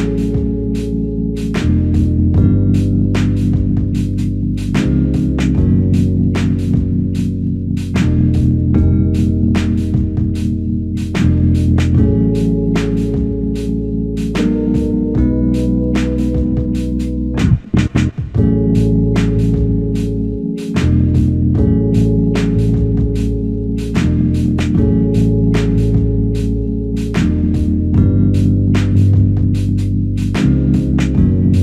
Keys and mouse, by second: 3.5 shift+click, 3.8 shift+double click, 4.0 shift+click, 6.2 shift+click, 7.9 ctrl+click, 13.0 alt+click, 13.5 alt+shift+click, 14.4 shift+click, 15.4 shift+click, 19.0 ctrl+click, 20.3 alt+click, 21.0 shift+click, 21.9 shift+click, 22.2 shift+click, 23.3 shift+click, 25.1 shift+click, 26.1 alt+click, 26.9 ctrl+click, 28.9 alt+click, 30.3 ctrl+click.